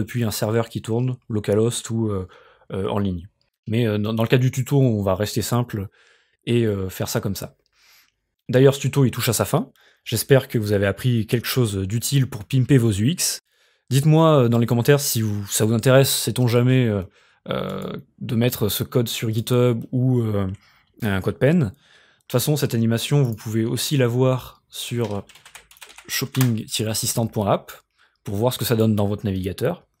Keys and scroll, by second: 25.2-26.5 typing.